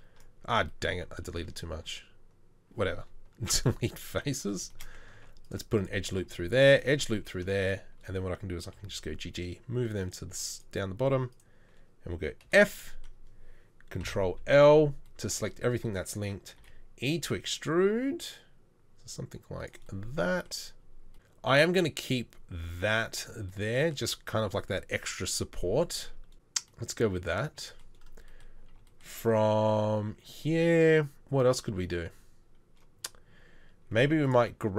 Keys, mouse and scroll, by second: 1.3 ctrl+z, 3.3 Delete, 5.1 ctrl+r, 6.3 ctrl+r, 8.8 g, 12.5 f, 14.0 ctrl+l, 16.6 e.